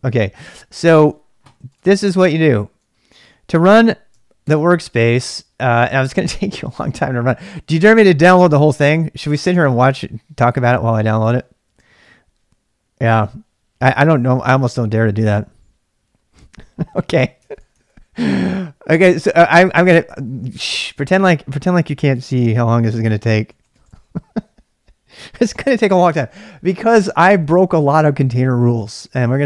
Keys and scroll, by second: 4.4 ctrl+c, 8.0-9.5 typing, 11.2-11.6 typing, 17.4 ctrl+[, 17.6-20.4 typing, 19.2 ctrl+c, 22.4-25.1 typing.